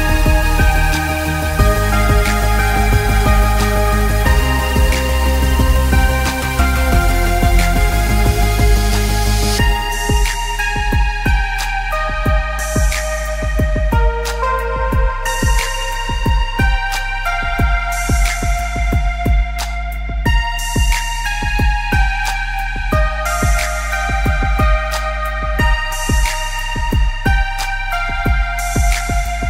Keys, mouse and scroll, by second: 0.1 click, 0.5 click, 0.7 space, 0.9 click, 1.4-1.9 scroll up 2, 1.7 click, 2.0 click, 2.3 space, 2.6 click, 3.8 space, 4.0 click, 5.8 click, 6.5 click, 7.7 click, 7.8 space, 8.0 click, 10.6 scroll up 1, 11.0 click, 11.3 scroll up 1, 11.6 click, 12.4 click, 13.0 space, 13.1 scroll down 1, 13.5 click, 13.6 space, 13.9 scroll up 1, 14.0 click, 15.6 space, 15.8 click, 16.6 space, 16.7 alt+scroll down 1, 17.0 click, 17.8-21.1 typing, 18.1 click, 18.9 click, 19.7 click, 20.3 click, 21.4 click, 21.6 alt+scroll down 1, 21.7 click, 21.8 alt+scroll up 2, 22.0 click, 23.8 click, 24.2 alt+scroll up 2, 24.5 click, 24.9 space, 25.1 scroll up 1, 25.3 click, 26.1 click, 26.5 ctrl+z, 26.9 click, 28.6 click, 29.0 click, 29.4 scroll down 2.